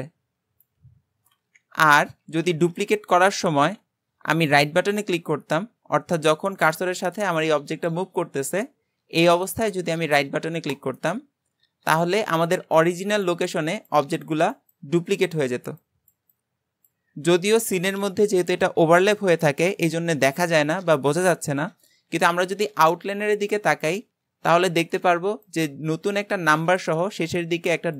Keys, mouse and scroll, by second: 2.3 ctrl+z.